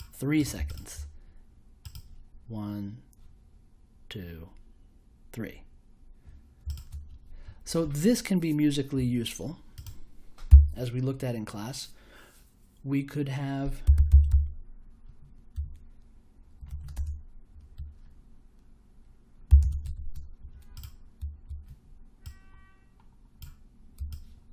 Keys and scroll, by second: 10.4 n, 13.6-15.5 typing, 16.6 shift+/, 16.9 space, 19.2-20.3 typing.